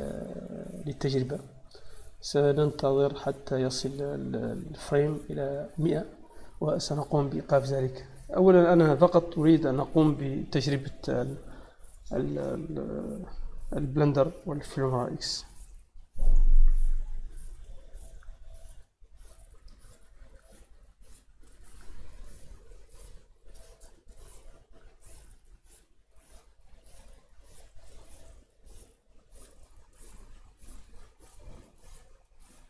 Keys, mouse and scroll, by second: 3.8-4.4 drag.